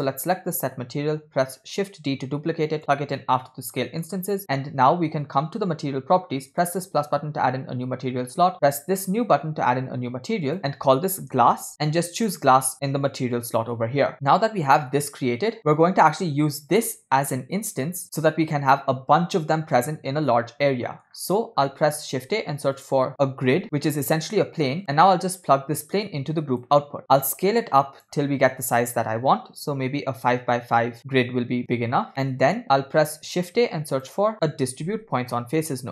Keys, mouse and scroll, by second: 1.5 shift+d, 3.8 middle click, 4.4-6.3 scroll up 2, 6.6 click, 8.5-9.6 drag, 10.5-11.7 drag, 11.7 s, 12.2-14.1 drag, 14.9-17.1 drag, 17.9-18.7 scroll down 2, 18.0 middle click, 20.9 middle click, 21.1-21.7 scroll up 2, 21.7 shift+middle click, 22.1 shift+a, 25.5-26.8 drag, 27.0 middle click, 27.7-31.0 shift+drag, 32.1 middle click, 33.0 shift+a.